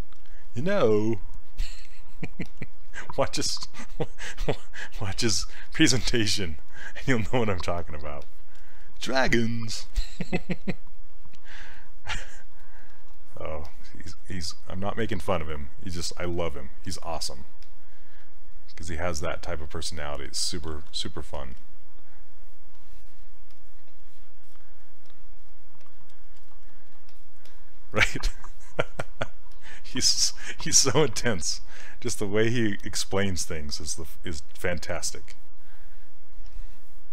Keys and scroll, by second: 1.7 s, 10.0 s, 20.8 ctrl+z.